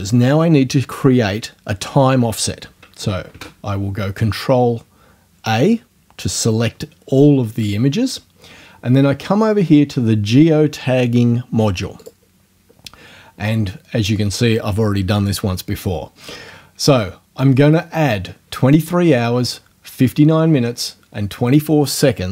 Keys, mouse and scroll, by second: 3.3 ctrl+a, 12.0 click.